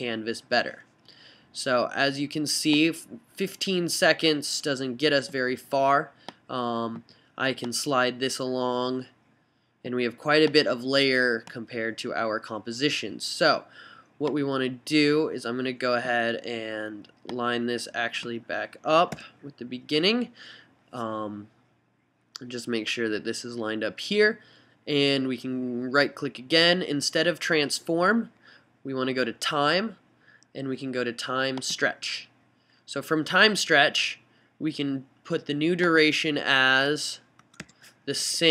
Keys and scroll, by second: 19.3 [, 37.6 BackSpace, 37.8 0, 38.4 Right.